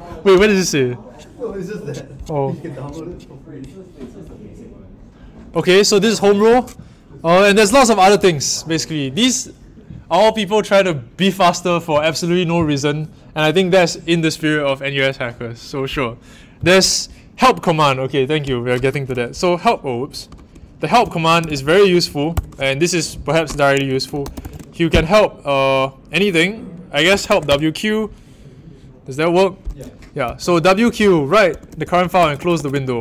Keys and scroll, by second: 21.1-22.3 typing, 23.6-24.9 typing, 26.8-27.7 typing, 30.2-33.0 typing.